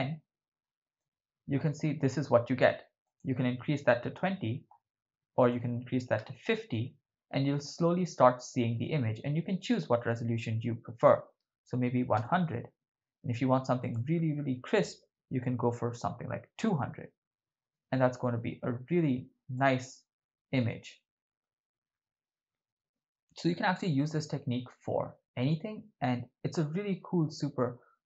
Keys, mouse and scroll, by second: 1.0-2.1 ctrl+middle drag, 3.0-4.2 drag, 5.4-6.5 drag, 9.6-12.3 drag, 11.8 0, 13.8-16.9 drag, 16.2 0, 19.7-21.0 ctrl+middle drag.